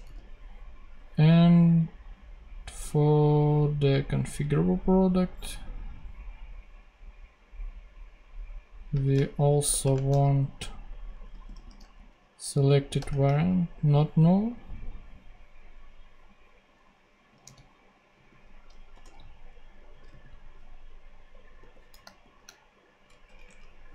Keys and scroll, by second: 8.8 space, 9.6 shift+7, 9.8 shift+space, 10.9-11.9 typing, 12.9 Return, 17.3 super+d, 18.6-20.3 typing, 21.5 t, 22.1 shift+s, 23.1 shift+BackSpace.